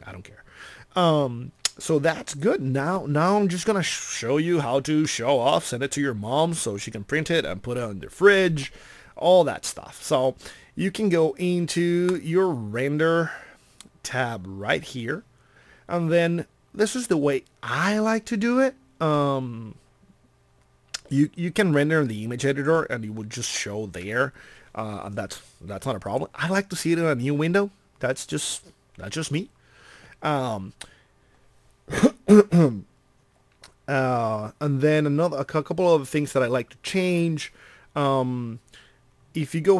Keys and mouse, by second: 5.5 middle click.